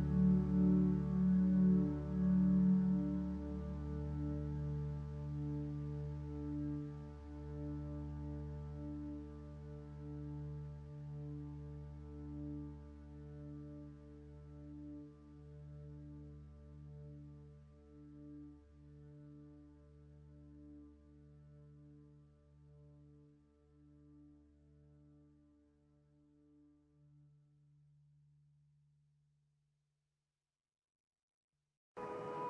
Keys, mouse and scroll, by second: 7.9 ctrl+space, 11.7 ctrl+space, 24.2 ctrl+t, 31.1 ctrl+t.